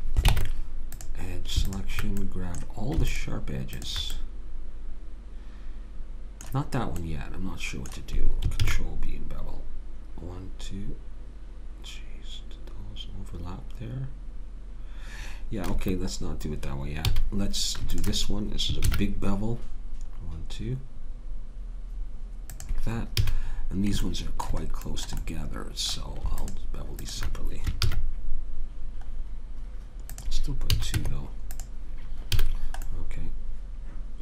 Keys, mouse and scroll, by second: 0.3 ctrl+Tab, 2.2 click, 5.2 click, 7.0-8.6 middle drag, 8.6 ctrl+b, 17.1 a, 18.0 click, 18.8 ctrl+b, 23.2 a, 23.5 middle click, 26.4-27.8 drag, 27.8 ctrl+b, 30.7 a, 31.0 Tab, 32.4 a, 33.0-34.2 middle drag.